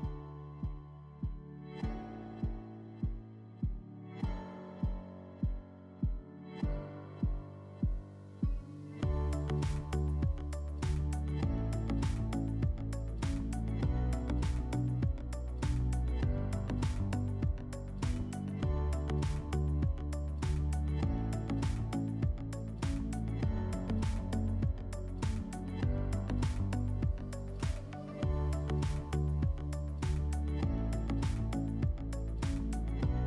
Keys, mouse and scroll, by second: 0.9 click, 2.1 alt+w, 3.2 middle click, 4.5 alt+middle click, 7.1 click, 7.9 click, 8.0 click, 8.8 typing, 9.6 Return, 13.9 click, 15.3 click, 16.5 click, 20.4 click, 22.8 alt+w, 25.1 click, 27.6 click, 28.5 click, 28.7 click, 29.3 typing, 29.8 Return, 32.1 click.